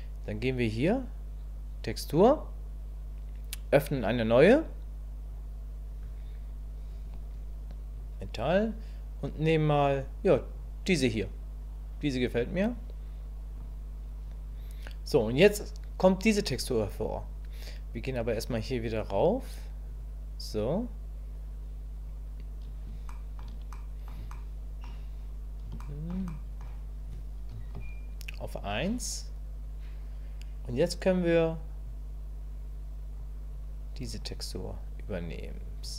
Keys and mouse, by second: 19.9 click, 23.1 shift+click, 23.7 click, 24.3 shift+click, 25.8 shift+middle click, 26.3 middle click, 27.5 KP_1, 31.9-33.2 middle drag, 33.5 middle click, 35.3 click.